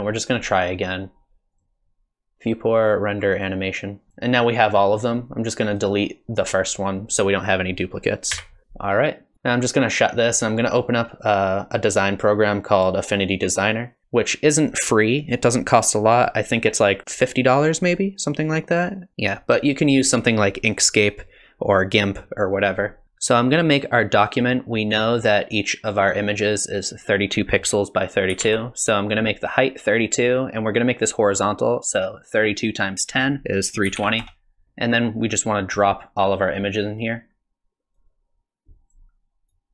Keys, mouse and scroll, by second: 1.6 click, 9.3 click.